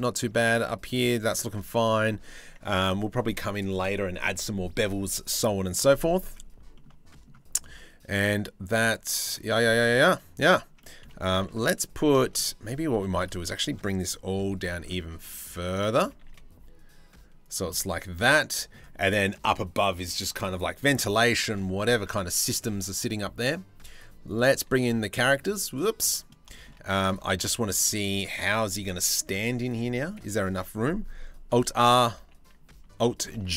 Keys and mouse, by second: 0.2 middle click, 6.3 shift+middle click, 7.2-9.0 middle drag, 9.2 middle click, 10.4 middle click, 10.9 middle click, 11.2 middle click, 11.8 shift+middle click, 12.0 click, 12.5 3, 12.8-14.0 drag, 14.0 c, 15.7 g, 17.3-18.3 drag, 21.7 Tab, 23.6 click, 23.9 click, 25.3 click, 25.6 middle click, 27.8 click, 29.3 click, 32.1 alt+r, 33.0 alt+g.